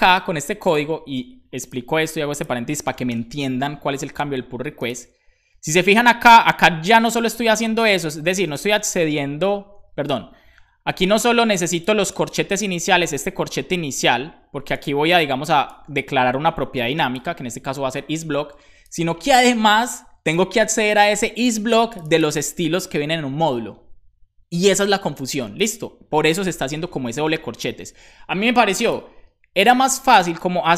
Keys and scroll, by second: 3.0 BackSpace, 8.5 Return, 26.7 shift+super+Left, 26.9 BackSpace.